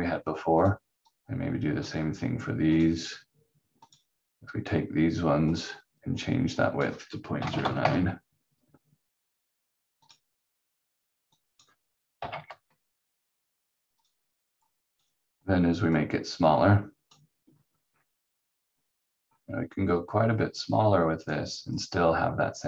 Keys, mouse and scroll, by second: 0.6 click, 7.1-8.0 typing, 10.0 click, 12.2 ., 12.5 9, 12.7 Return, 14.0 click, 17.6-18.9 scroll up 1, 20.6 click.